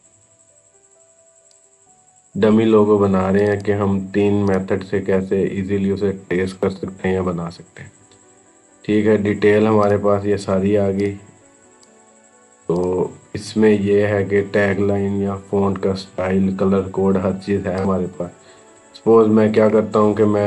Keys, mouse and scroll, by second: 1.3 click, 9.7 click, 17.6 click.